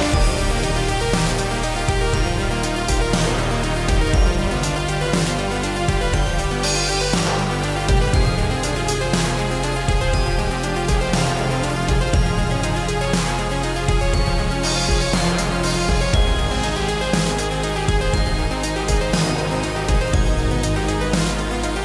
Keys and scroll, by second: 3.2 ctrl+c, 10.2 ctrl+v.